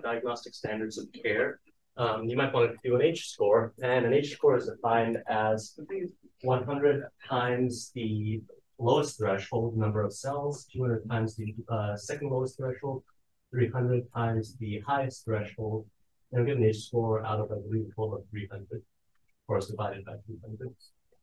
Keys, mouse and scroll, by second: 4.1-5.0 scroll down 1, 5.0 click, 5.0 scroll down 1, 7.0 click, 10.2-14.5 scroll down 1, 14.5-15.3 scroll up 1, 15.3-15.8 drag, 15.3-16.1 scroll up 1, 15.8 d, 16.1 scroll down 1, 17.0-17.7 drag, 17.7-18.6 scroll down 1, 18.6-19.4 scroll down 1, 19.4 click, 19.4-20.2 scroll down 1, 20.2-20.8 scroll down 1, 20.8-21.2 drag.